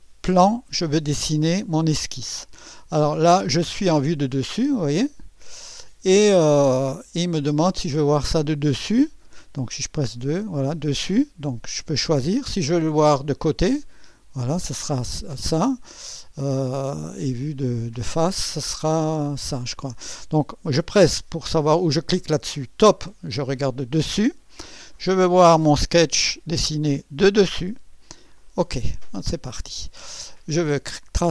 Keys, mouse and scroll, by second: 4.1-6.2 drag, 7.3-8.7 drag, 10.1 2, 10.2 2, 11.9 click, 12.4 click, 14.0 click, 17.9 click, 19.0 click, 22.8 click, 26.2 click, 28.3 click, 29.4 scroll up 1.